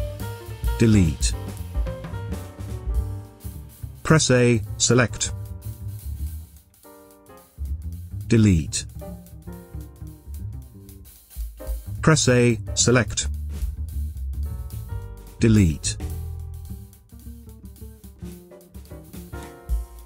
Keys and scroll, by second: 0.9 Delete, 2.0 space, 4.5 a, 7.9 Delete, 9.3 space, 12.1 a, 15.2 Delete, 17.6 Delete, 19.9 Delete.